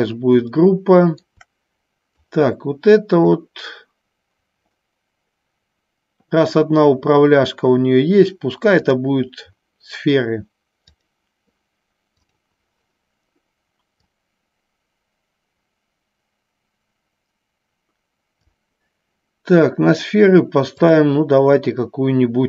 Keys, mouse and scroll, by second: 0.8 shift+middle click, 2.5 click, 8.9-11.2 drag, 12.5 click, 14.1-18.6 drag, 20.9 click.